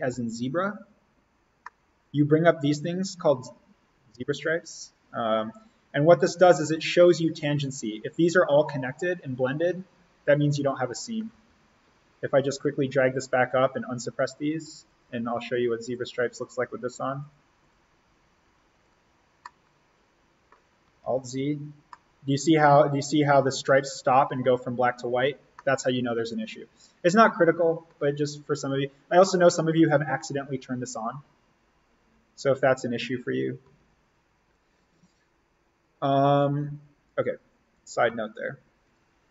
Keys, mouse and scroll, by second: 0.0 alt+z, 1.4 scroll down 1, 1.5-5.0 middle drag, 5.0-6.6 scroll up 1, 6.6-7.1 scroll down 1, 11.4 alt+z, 12.6-14.2 drag, 19.3 scroll up 1, 19.6 scroll, 20.8 alt+scroll, 21.0 alt+z, 21.8 middle click, 21.9 scroll, 25.5-33.7 middle drag, 33.7 z, 37.6 click, 38.8-39.3 shift+drag.